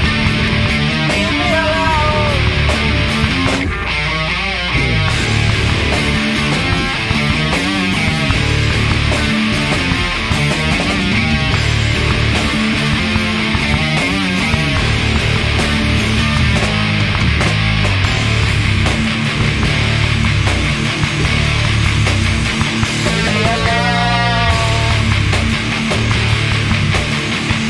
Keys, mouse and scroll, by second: 2.1-3.0 drag, 3.6 drag, 4.4-6.2 drag, 7.3 g, 9.4-11.0 drag, 10.4 KP_7, 12.0-23.0 middle drag, 22.4 KP_7, 23.6 KP_4, 24.1 KP_2, 24.4 KP_3, 25.7 KP_1, 26.8-27.6 middle drag.